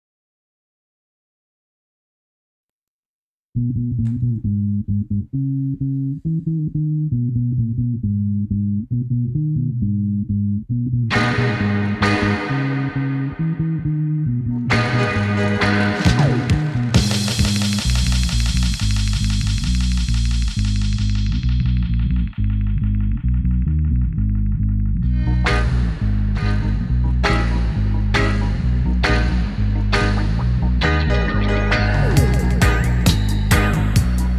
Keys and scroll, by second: 13.0 Tab.